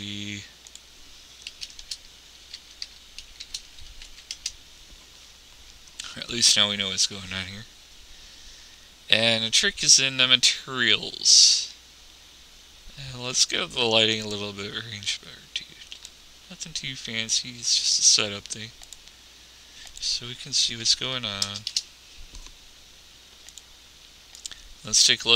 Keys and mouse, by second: 10.3 click, 12.4-13.6 middle drag, 15.6-17.3 drag, 18.4-22.1 drag, 24.0-25.3 drag.